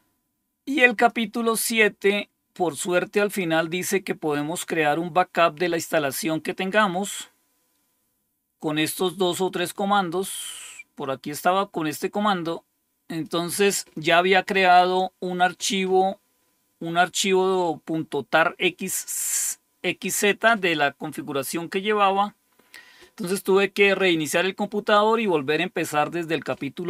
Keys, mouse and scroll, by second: 0.9 click, 3.2-3.7 scroll down 2, 3.7-4.1 scroll down 1, 5.8-7.7 scroll down 3, 8.9-10.2 drag, 10.6-11.8 scroll down 2, 11.8-13.2 drag, 22.4-26.8 scroll down 2.